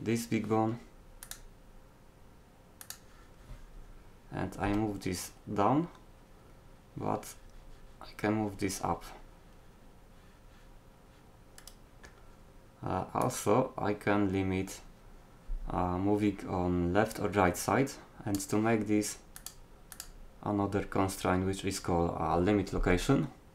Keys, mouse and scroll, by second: 1.3-3.1 middle drag, 4.7 g, 13.3-14.9 middle drag, 15.0 click.